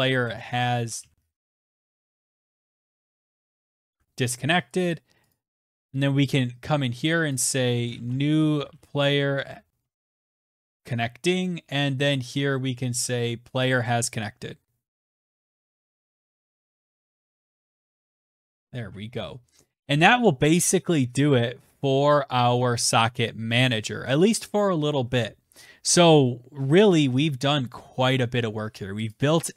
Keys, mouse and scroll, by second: 0.0-3.6 typing, 3.4-4.2 scroll, 4.2 click, 4.4 click, 4.8 click, 6.7 click, 7.1-11.7 typing, 13.0 click, 14.2-18.2 typing, 14.6-16.2 drag, 17.2 click, 17.6 click, 18.0 click, 18.2 ctrl+s, 19.6-21.0 scroll, 21.0-21.3 scroll, 26.0 scroll, 26.6-28.4 scroll, 28.5 click.